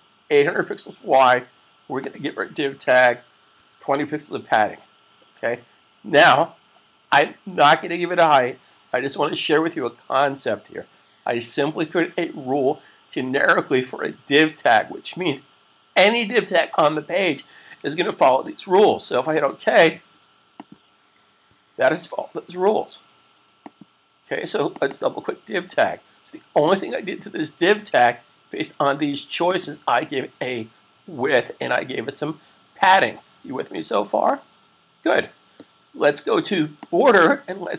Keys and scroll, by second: 0.0-0.5 typing, 3.2-4.0 typing, 21.4 super+s.